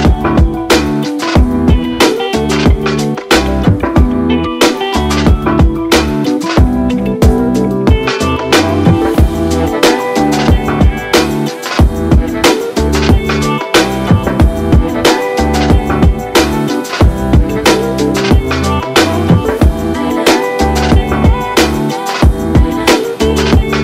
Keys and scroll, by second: 1.0 v, 1.2 v, 3.5-4.9 typing, 6.8-7.8 typing, 8.8 ctrl+d, 9.2-10.2 typing, 13.9 ctrl+z, 18.2 ctrl+1, 19.0 ctrl+d, 23.4 ctrl+z.